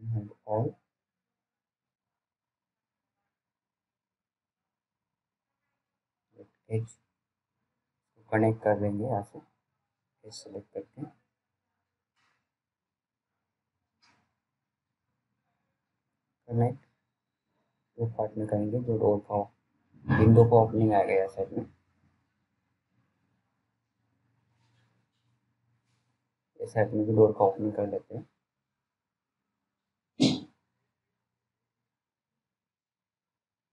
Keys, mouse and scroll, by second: 3.0 click, 5.7-6.1 scroll down 1, 6.3 alt+middle click, 7.8 t, 9.2-9.8 scroll down 1, 9.8 click, 11.3 g, 12.5 click.